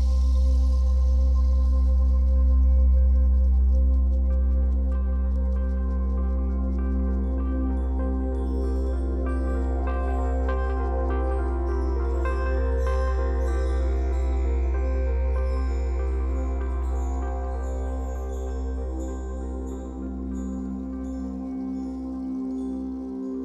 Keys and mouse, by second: 0.6 ctrl+s, 1.9 click, 3.6 click, 4.0 click, 4.4 click, 5.4 click, 5.9 click, 10.1 i, 11.7 click, 12.6 click, 13.2 click, 14.4 BackSpace, 14.6 BackSpace, 17.8 click, 19.6 typing, 19.9 Return, 20.8 i.